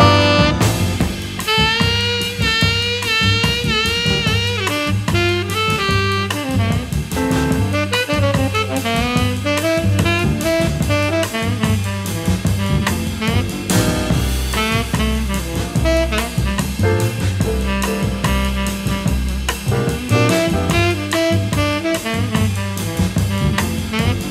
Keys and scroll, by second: 1.3 v, 4.9 x, 20.2 BackSpace, 21.6 a.